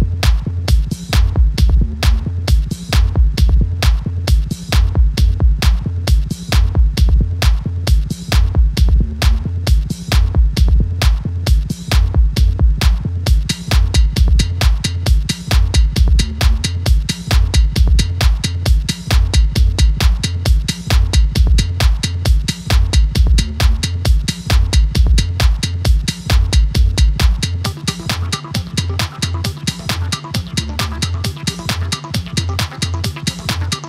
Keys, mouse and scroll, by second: 0.3 KP_7, 1.1-1.7 scroll up 3, 1.7 k, 3.1 click, 3.6 l, 4.3 k, 5.6 click, 6.0 k, 10.7 k, 12.1 click, 12.8 click, 13.9 x, 14.9 scroll down 1, 15.1 middle click, 15.5 scroll up 2, 15.7 ctrl+s, 16.2 click, 17.3-18.4 drag, 18.6 a, 19.2-21.1 drag, 21.1 scroll down 2, 21.2 middle click, 21.8 click, 22.3 ctrl+s, 22.4 click, 22.6 click, 22.9-24.4 scroll up 1, 24.4 ctrl+s, 24.8 click, 25.1 scroll up 2, 25.2 scroll down 2, 25.4 middle click, 26.0 click, 27.3 click, 28.1 scroll up 2, 28.3 scroll down 2, 28.4 middle click, 29.3 ctrl+s, 29.6 scroll up 2, 29.7 scroll down 2, 29.8 middle click, 30.6 scroll down 2, 30.8 scroll up 2, 31.0 middle click, 31.4 click, 32.0 click, 32.6 x.